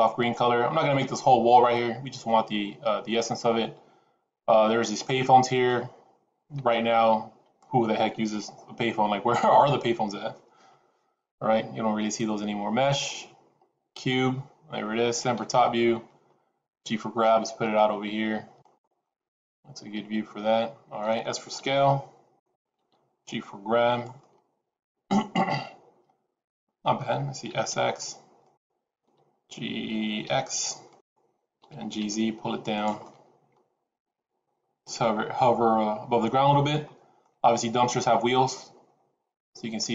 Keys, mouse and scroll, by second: 10.5 shift+a, 15.3 KP_7, 16.3-16.7 scroll down 1, 16.7 g, 18.9 middle click, 21.5 s, 22.7 g, 24.1 middle click, 27.4 s, 29.0 g, 31.5 g, 32.9 middle click.